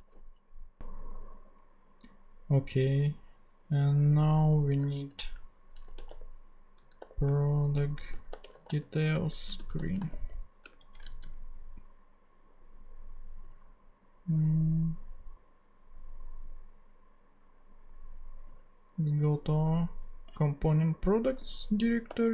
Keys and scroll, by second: 0.0-0.6 typing, 5.1-10.7 typing, 10.8 alt+shift+Left, 11.1 alt+shift+super+c, 12.1 super+c, 22.1 super+n.